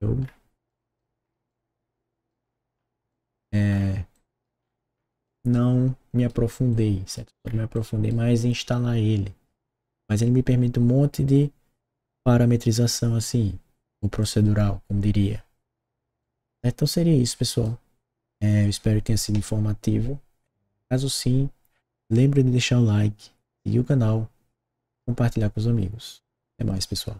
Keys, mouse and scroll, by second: 0.6 right click, 1.1 middle click, 1.4 right click, 2.3 middle click, 3.0 right click, 4.1 right click, 4.5 middle click, 5.2-6.2 right drag, 6.4 middle click, 6.7 right click, 7.4 scroll down 1, 7.7 right click, 8.3 click, 12.9 right click, 14.2 click, 16.1-17.6 right drag.